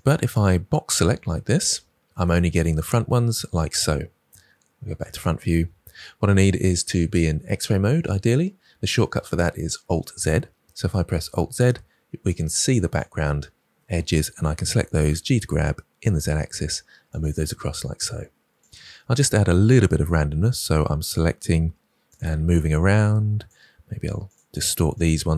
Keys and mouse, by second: 2.2 middle click, 5.0 KP_1, 11.2 alt+z, 14.7 g, 15.0 x, 17.0 click, 20.2 g, 21.4 r, 22.0 click, 23.7 r, 24.2 click.